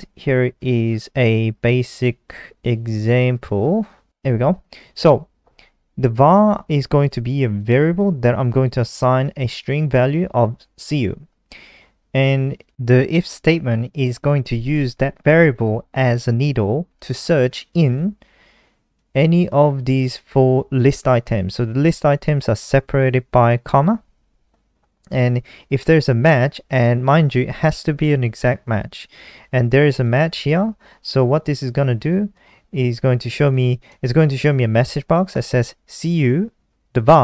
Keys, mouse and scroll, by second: 0.8-1.1 scroll up 4, 1.5-4.0 scroll up 31, 4.0 Up, 4.0 End, 4.0 Return, 4.2 Return, 5.1 click, 14.6 click, 18.0 click, 18.1 click, 19.3 click, 30.2 click, 30.2 click, 31.9 click, 34.2 ctrl+s, 35.2 F5.